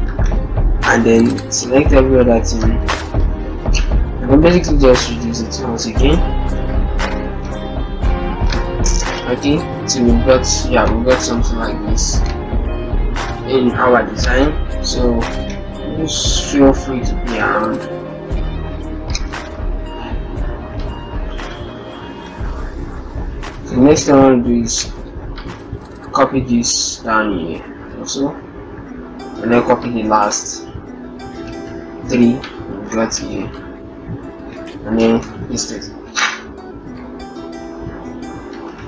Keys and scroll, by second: 3.0 ctrl+t, 6.7 shift+Right, 6.9 Down, 7.1 Down, 7.7 Right, 28.2 ctrl+alt+shift+Tab, 31.5 ctrl+c, 34.3 ctrl+a, 34.8 ctrl+v.